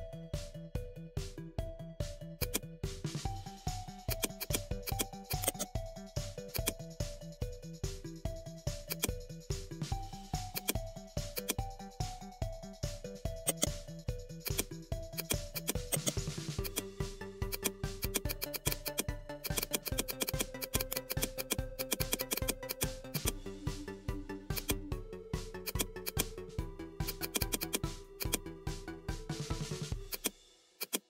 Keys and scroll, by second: 9.7 ctrl+i.